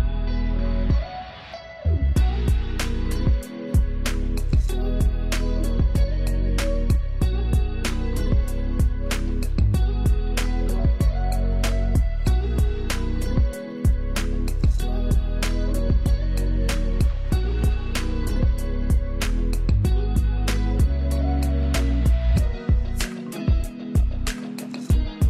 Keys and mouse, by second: 6.4 click, 6.8 ctrl+space, 7.2 ctrl+alt+click, 9.0 ctrl+space, 9.3 ctrl+click, 9.6 ctrl+space, 11.0 ctrl+click, 12.2 ctrl+x, 13.2-20.3 ctrl+drag, 21.3 ctrl+space, 21.5 ctrl+alt+click.